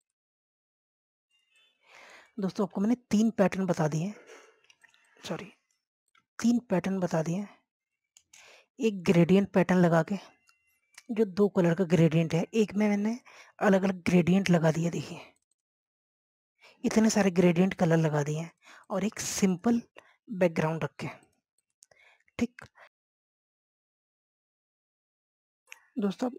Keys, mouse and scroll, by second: 0.1 scroll down 1, 0.6-2.5 drag, 2.6 shift+click, 3.3 click, 4.0 ctrl+z, 4.1-6.0 drag, 6.0 scroll down 1, 6.7 click, 23.1-23.4 scroll down 1, 23.8 click.